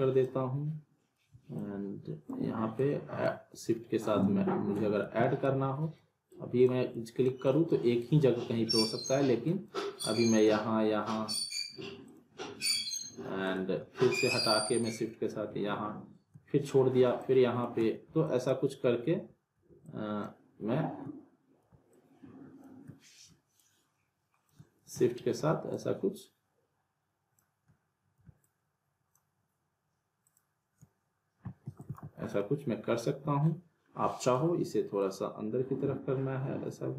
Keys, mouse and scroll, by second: 1.5-2.5 shift+drag, 5.0 ctrl+z, 6.3-6.9 click, 10.3-15.4 shift+drag, 25.7-27.6 shift+drag, 31.7 alt+w, 31.8 alt+right click, 31.9 alt+w, 32.3-33.6 alt+middle drag, 33.9 scroll up 1, 34.1 alt+middle click, 35.0-36.9 drag.